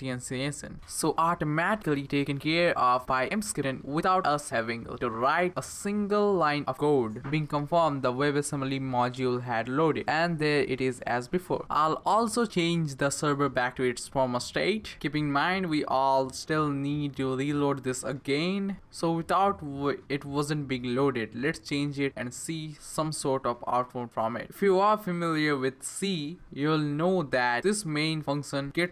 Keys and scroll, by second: 12.1 super+/.